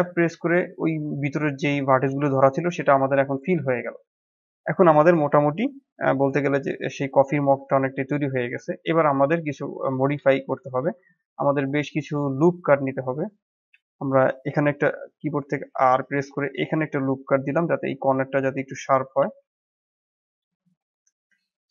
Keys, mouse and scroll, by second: 0.7-3.4 middle drag, 3.4 Tab, 3.6 scroll down 1, 3.9-5.1 middle drag, 5.1 scroll up 1, 5.4-6.8 middle drag, 6.8-7.1 scroll down 2, 7.1-8.1 middle drag, 8.1 click, 8.5-9.0 middle drag, 9.0-9.4 scroll up 5, 9.8 click, 10.1-10.9 middle drag, 10.9 Tab, 15.0 ctrl+r.